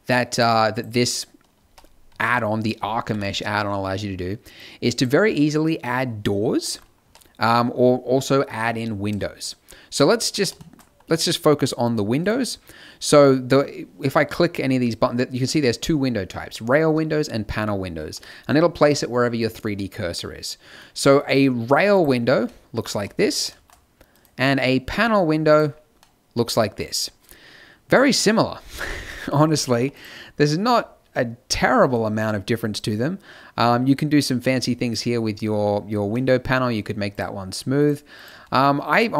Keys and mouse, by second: 0.7-2.0 drag, 1.5 z, 2.0 z, 3.0 t, 6.3 middle click, 6.9 z, 12.1-18.1 middle drag, 19.7-21.8 middle drag, 22.4 middle click, 22.9 z, 25.9 middle click, 26.5-29.1 drag, 29.1 t, 29.8 click, 30.6 n, 37.0 click, 37.7-39.1 middle drag.